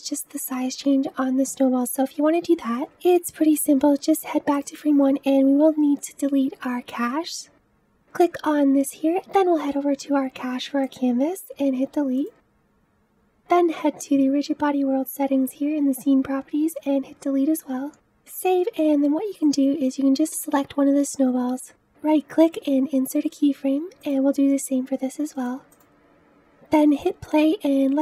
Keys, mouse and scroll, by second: 1.4-4.8 scroll down 1, 4.8-7.5 drag, 8.1 click, 12.4-19.6 drag, 22.7-24.2 right drag, 24.2 click, 26.0 right click, 26.4 ctrl+z, 26.8 space.